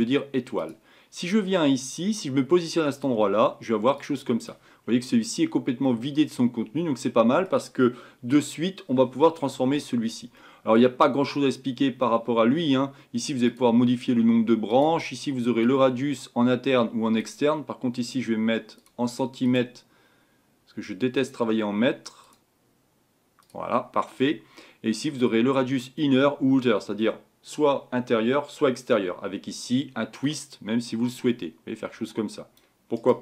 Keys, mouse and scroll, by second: 3.0 click, 4.8-5.8 scroll up 5, 5.8-13.5 middle drag, 13.5-33.0 drag, 33.0-33.2 right drag.